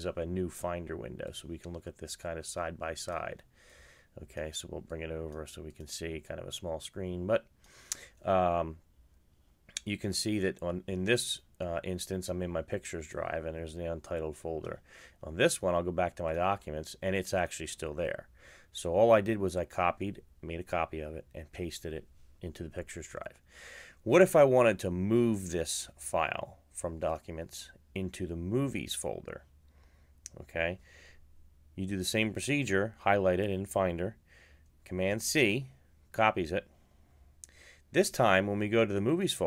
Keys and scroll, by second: 34.5 super+c.